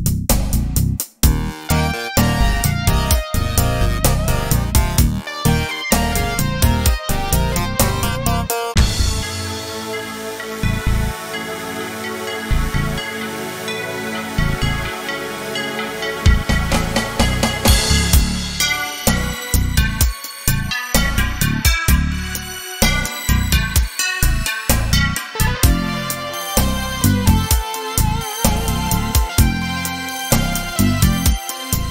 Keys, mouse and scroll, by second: 0.8 click, 1.6 click, 3.0-9.9 right drag, 10.7 click, 12.9 KP_Decimal, 15.4 click, 18.3 KP_0, 28.2-31.9 drag.